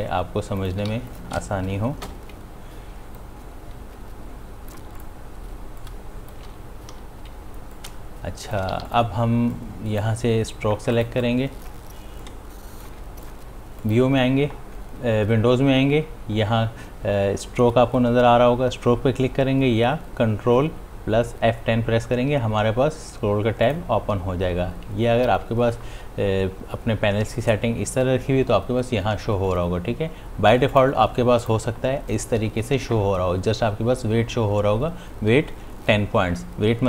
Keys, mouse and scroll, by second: 0.9 v, 1.7 click, 2.4 l, 3.3-7.6 drag, 7.6 l, 9.4-13.7 drag, 24.0 click, 30.8 click.